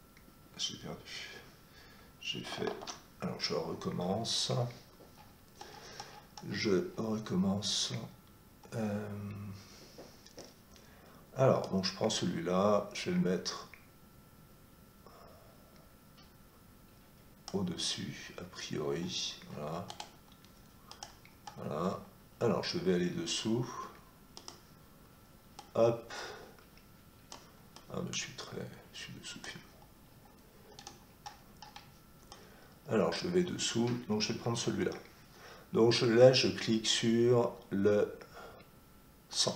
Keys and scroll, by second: 2.7 ctrl+z, 34.6 Escape.